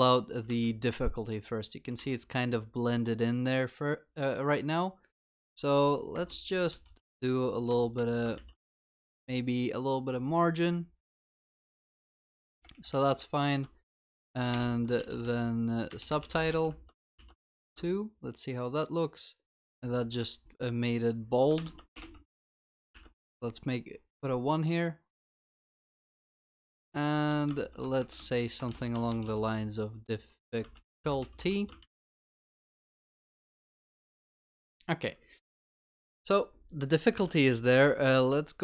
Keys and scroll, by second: 8.4 ctrl+s, 11.8 ctrl+s, 14.5 ctrl+BackSpace, 17.2 ctrl+s, 22.4 ctrl+s, 31.9 ctrl+s.